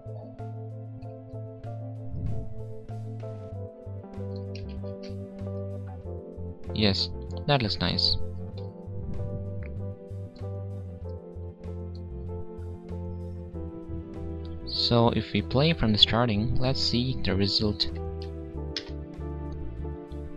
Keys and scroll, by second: 4.6 ctrl+shift+z.